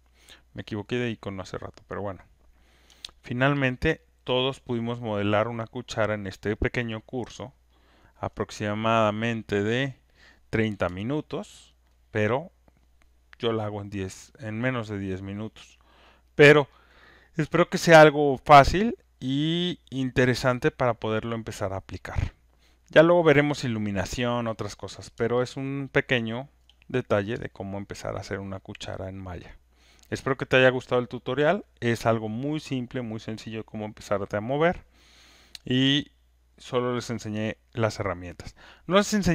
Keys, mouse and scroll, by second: 0.8 click, 3.5 alt+right click, 3.9 alt+click, 4.0 alt+click, 4.3 alt+right click, 4.7 alt+middle click, 6.3 alt+click, 6.8 alt+right click, 7.1 alt+middle click, 7.6 alt+click, 8.4 alt+right click, 11.7 alt+right click, 11.9 alt+middle click, 14.1 alt+click, 14.7 alt+right click, 16.0 alt+click, 16.6 alt+right click, 16.9 alt+middle click, 17.2 alt+click, 18.1 alt+right click, 18.6 alt+click, 19.3 right click, 22.0-23.7 right drag, 26.5 alt+click, 29.3 click, 37.4-39.3 alt+drag.